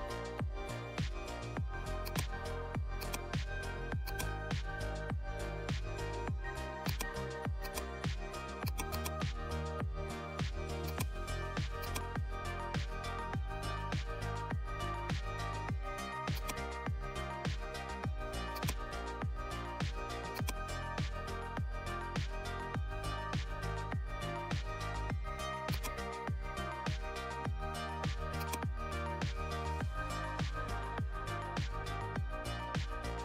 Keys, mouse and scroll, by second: 14.1 right click, 16.3 click, 18.5-20.3 drag, 20.3-23.0 drag, 25.7-33.2 drag.